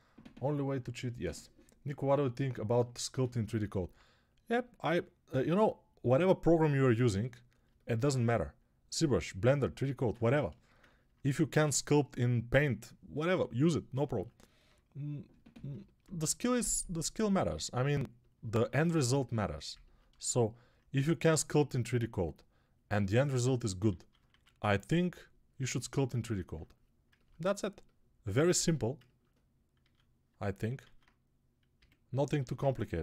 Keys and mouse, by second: 23.9 alt+q, 24.1 1, 29.7 alt+q, 31.0 alt+q, 31.6 a, 32.3 alt+q.